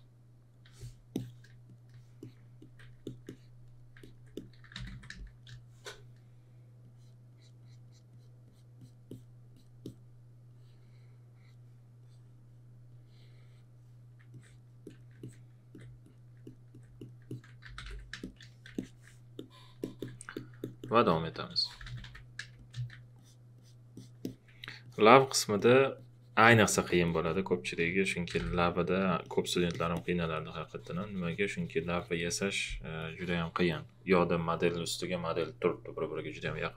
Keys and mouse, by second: 0.6 q, 1.1 click, 1.6 alt+click, 3.0 alt+click, 4.4-5.4 typing, 14.3 alt+click, 16.4 alt+click, 17.4-18.3 typing, 18.6 click, 20.6 alt+click, 21.5-22.5 typing, 22.6 click, 23.2 alt+click, 27.8-28.9 typing, 29.2 alt+click.